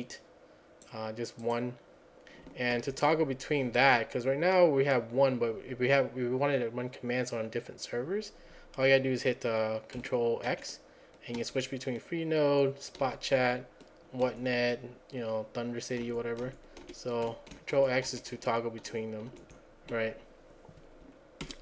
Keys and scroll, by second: 2.8 alt+1, 10.5 ctrl+x, 11.4 ctrl+x, 13.1 ctrl+x, 14.3 ctrl+x, 16.1 ctrl+x, 21.5 alt+Left.